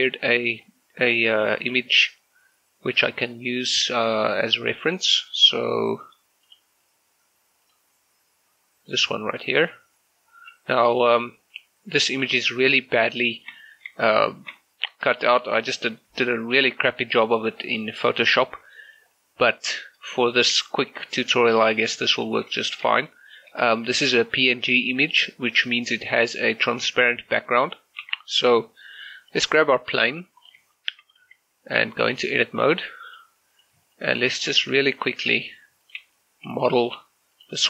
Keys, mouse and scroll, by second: 0.3-1.4 scroll down 1, 1.4 click, 6.5 click, 11.4 g, 12.2 click, 13.1 shift+middle click, 15.3 shift+middle click, 15.8-16.1 scroll up 2, 16.3 shift+middle click, 19.0-20.3 shift+middle drag, 20.3 scroll down 1, 20.7 shift+middle click, 21.6 shift+middle click, 23.1 shift+middle click, 23.9 shift+middle click, 25.3 shift+middle click, 28.1 g, 30.4 click, 30.8 shift+middle click, 31.3 z, 31.9 Tab, 33.1 click, 33.6 right click, 34.7-37.6 typing, 35.3 right click, 35.9 click, 36.6 click, 37.4 click.